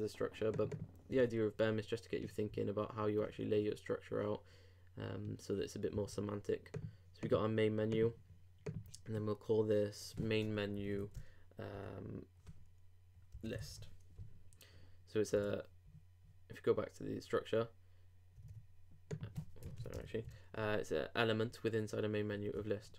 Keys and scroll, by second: 6.0 super+Tab, 15.4 super+Tab, 18.4 super+Tab, 19.9 shift+BackSpace, 20.0 shift+-, 22.4 super+s.